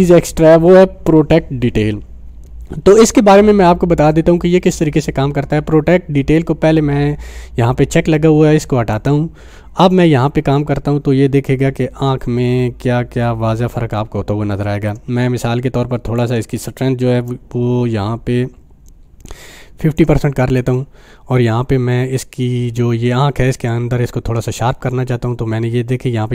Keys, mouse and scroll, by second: 9.6 click, 16.2-20.1 drag, 24.6-26.3 drag.